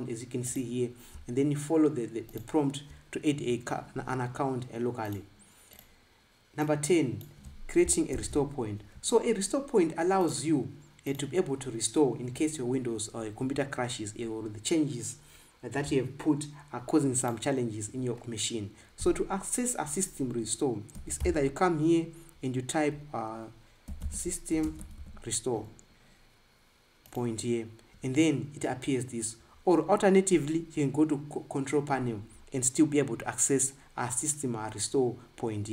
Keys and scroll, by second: 8.9 ctrl+b, 21.2 s, 23.9-25.9 typing.